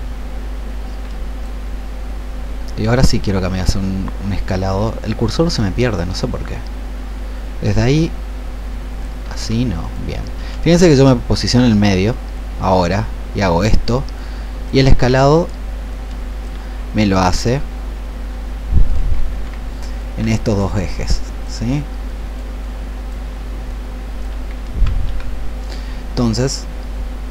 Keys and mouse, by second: 9.8-15.0 drag, 15.0 ctrl+z, 15.8 click, 19.2 ctrl+2, 25.0 Escape.